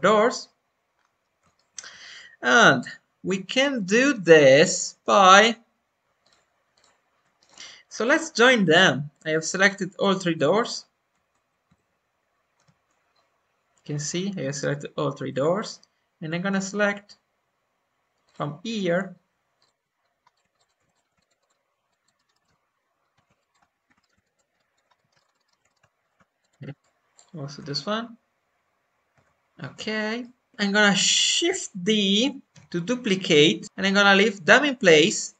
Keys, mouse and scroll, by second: 0.9-1.3 scroll up 2, 1.5-4.5 shift+middle drag, 4.9 click, 5.2 Tab, 6.0 scroll down 1, 6.1-7.3 shift+drag, 7.3-8.5 right drag, 9.3 click, 10.3 h, 11.7 ctrl+z, 12.5 g, 14.3 middle click, 15.2 Tab, 18.2-20.0 drag, 20.2 scroll up 1, 20.3 click, 20.5 shift+click, 20.8 ctrl+z, 20.9-22.1 shift+drag, 22.1 shift+middle click, 23.4 shift+click, 24.0 shift+middle click, 24.1 scroll down 1, 24.2 shift+click, 24.8 scroll down 1, 24.9 alt+middle click, 25.2 alt+scroll up 1, 25.3 alt+middle click, 26.4-27.5 shift+drag, 29.1 shift+click, 30.1 middle click, 30.5 scroll up 2, 32.0 shift+d, 32.4 g, 35.0 middle click.